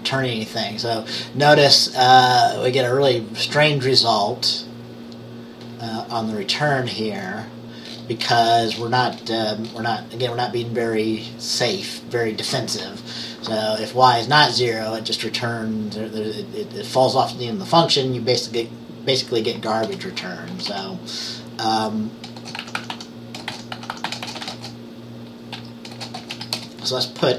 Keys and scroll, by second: 19.9 Return, 20.6 typing, 22.2-27.3 typing.